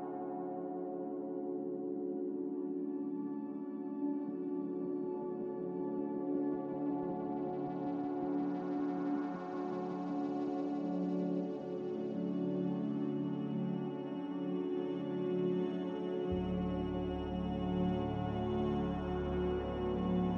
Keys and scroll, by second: 5.6 a, 7.5 s, 12.8 z, 16.1 ctrl+z, 18.7 a.